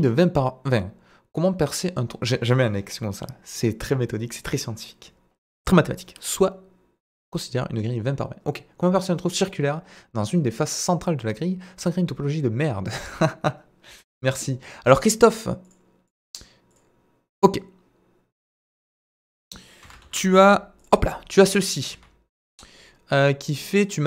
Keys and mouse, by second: 15.3-18.4 drag, 19.0 middle click, 19.8 Delete, 20.0 shift+a, 21.8 KP_7, 23.8-24.0 drag.